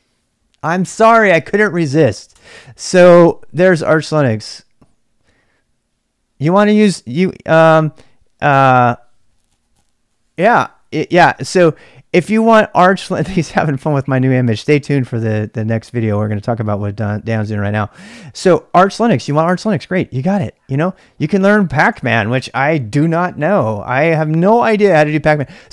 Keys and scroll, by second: 2.4 Return, 20.7-23.0 typing, 23.2 Return, 24.6 typing.